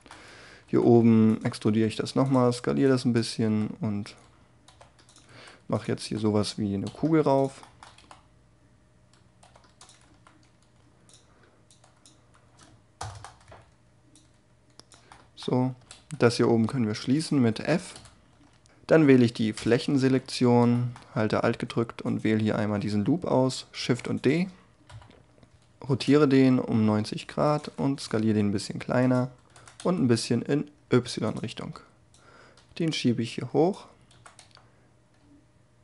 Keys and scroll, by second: 0.6 e, 1.6 s, 3.4 e, 4.7 z, 5.2 s, 6.0 e, 6.8 z, 7.9 e, 9.4 z, 10.0 s, 12.9 ctrl+*, 15.9 c, 17.9 f, 23.3 shift+d, 24.8 3, 25.8 r, 27.9 s, 29.7 y, 33.7 s, 34.3 y.